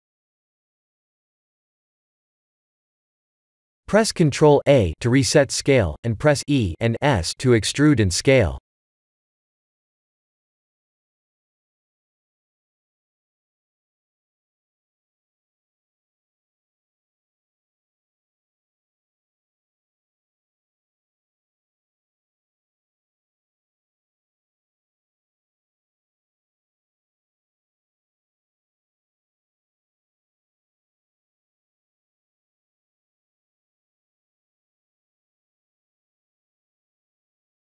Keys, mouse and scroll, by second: 3.9 middle click, 4.4 Tab, 5.3 ctrl+a, 8.4 Tab, 12.3 e, 14.8 middle click, 15.7 KP_7, 16.9-17.8 scroll up 1, 18.3 s, 20.8 middle click, 23.9 e, 29.3 KP_1, 30.3 g, 32.0 middle click, 32.6 shift+z, 33.1 middle click.